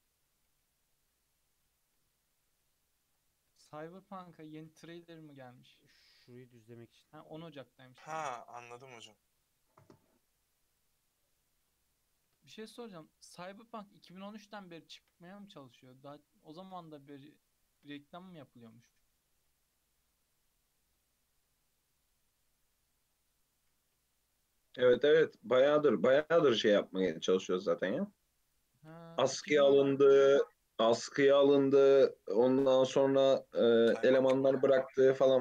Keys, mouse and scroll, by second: 0.0 ctrl+z, 0.6 ctrl+z, 1.1 ctrl+z, 1.6 ctrl+z, 2.1 ctrl+z, 2.6 ctrl+z, 3.6 Tab, 4.0-5.1 middle drag, 5.1 KP_3, 5.5-8.2 scroll up 2, 8.2-8.6 scroll up 1, 8.8-9.4 middle drag, 9.4 Tab, 9.5-10.2 scroll down 1, 10.2 x, 11.7-13.0 middle drag, 13.0 1, 13.0-14.3 middle drag, 14.3 click, 14.8 shift+click, 15.9 f, 16.7 ctrl+z, 16.9 shift+click, 17.7 shift+click, 18.1 f, 18.6-22.3 middle drag, 22.3-22.7 scroll up 1, 22.7-23.5 middle drag, 23.5 click, 24.4 shift+click, 24.9 shift+click, 25.6 shift+click, 26.2 shift+click, 26.6 f, 27.1 click, 27.7 shift+click, 28.4 shift+click, 29.0 alt+z, 29.5 shift+click, 30.6 f, 31.2 Tab, 31.4 scroll down 2, 31.7 alt+z, 32.0-32.7 middle drag, 32.7 KP_3, 33.1-33.6 scroll up 3, 33.8-34.1 shift+middle drag, 34.1 Tab.